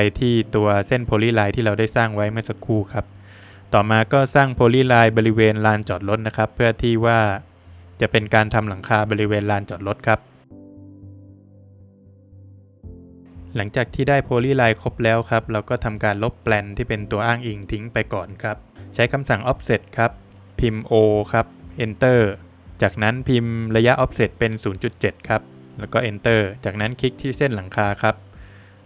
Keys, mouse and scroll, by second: 0.6 space, 0.9 scroll up 1, 2.7 scroll, 2.8 click, 3.1 scroll down 2, 3.3 middle click, 4.7 click, 6.4 click, 6.5 click, 7.7 ctrl+z, 10.0 click, 10.4 scroll down 1, 10.5 middle click, 11.2 scroll up 2, 12.2 scroll up 1, 12.3 click, 12.5 space, 13.0 Escape, 13.1 scroll down 2, 14.5 click, 15.1 click, 15.7 Delete, 16.3 scroll down 2, 16.5 middle click, 17.1 scroll down 1, 17.3 middle click, 17.4 Escape, 18.0 middle click, 19.2 Escape, 20.5 space, 25.2 Return, 26.2 scroll up 1, 27.2 click.